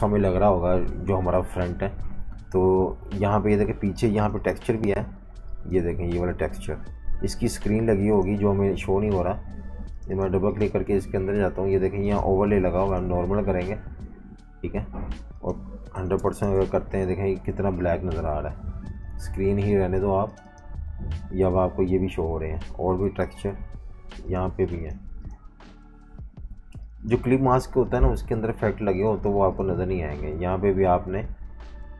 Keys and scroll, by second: 2.9 super+y, 3.3 super+y, 6.3 super+z, 15.7-17.4 typing, 19.0 super+z, 23.0 super+y, 23.4 super+y.